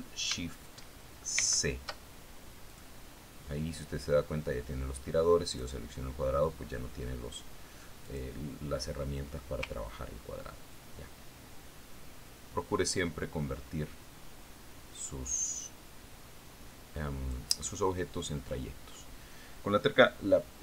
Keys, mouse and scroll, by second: 2.9 ctrl+shift+c, 4.2 click, 7.0 click, 9.5 click, 12.2-19.0 ctrl+drag.